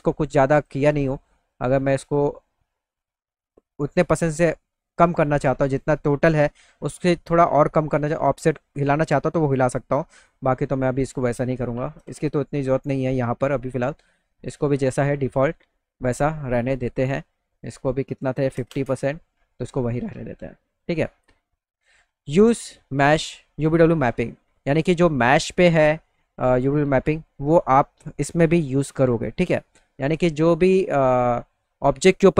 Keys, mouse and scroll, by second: 0.1 click, 1.5-7.0 drag, 10.1 right click, 11.0 click, 14.8 right click, 17.7 click, 24.7 click.